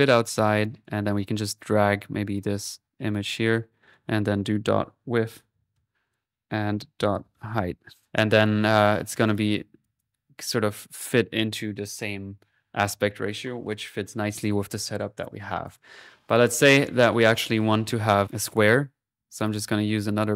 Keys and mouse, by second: 0.5 click, 2.3-3.4 drag, 3.8 click, 8.3 click, 8.6 middle click, 9.2 click, 9.5 middle click, 9.8 click, 14.1-15.6 middle drag, 15.6 click, 16.1 click, 17.4 click.